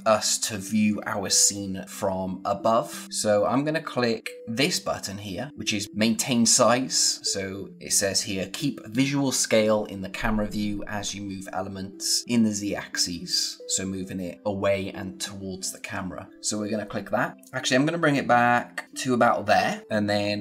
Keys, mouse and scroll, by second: 16.3 click, 19.8-20.4 scroll down 1.